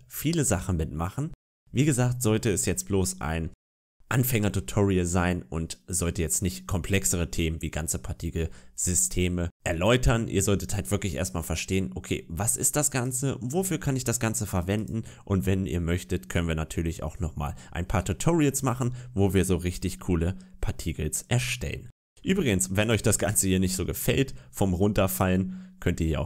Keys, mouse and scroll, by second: 12.9 click, 14.7 click, 20.5-22.7 scroll up 1, 22.7 click, 24.9 click.